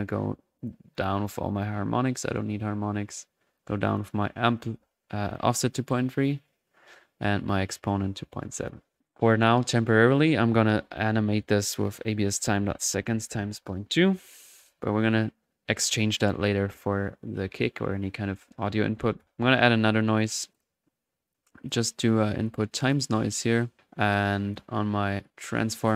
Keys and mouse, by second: 0.5-1.8 drag, 3.5 click, 5.3 click, 7.6-8.0 drag, 9.0-9.5 drag, 9.5-10.4 drag, 16.2 click, 16.5 click, 18.5 right click, 18.9-19.7 typing, 19.5 click, 19.9 drag, 20.5 click, 20.9-21.9 drag, 22.4 click, 24.4 click, 25.8 drag.